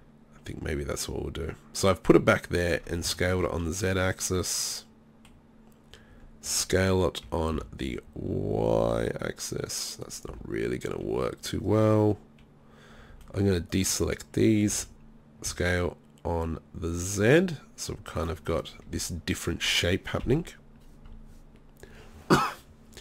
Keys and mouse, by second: 3.2-4.8 middle drag, 6.1 s, 10.1 middle click, 10.3 z, 13.1 b, 14.7 s, 18.8 middle click, 18.9 z, 20.2 KP_3.